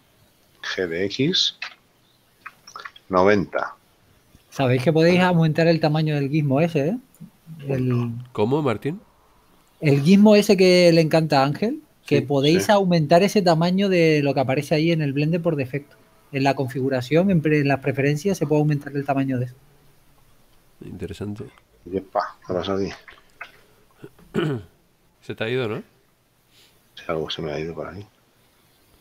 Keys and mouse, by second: 1.7 g, 2.6 x, 4.3 Return, 4.3 KP_Enter, 6.0 middle click, 17.1 click, 23.0 shift+z, 26.4 ctrl+z.